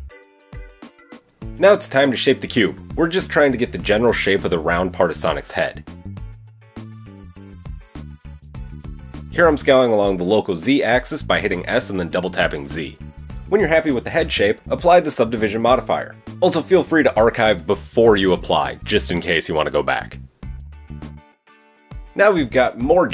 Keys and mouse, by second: 1.8 Tab, 2.8 s, 5.7-14.4 middle drag, 9.0 s, 14.2 KP_1, 14.4 Tab, 14.4-23.1 drag, 21.9 Tab.